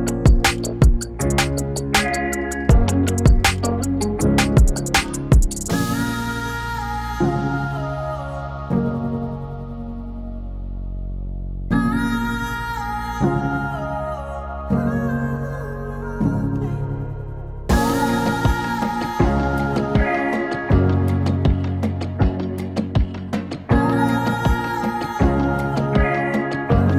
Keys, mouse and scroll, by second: 1.9-6.6 drag, 7.4-10.7 drag, 12.2 click, 17.0-26.9 drag.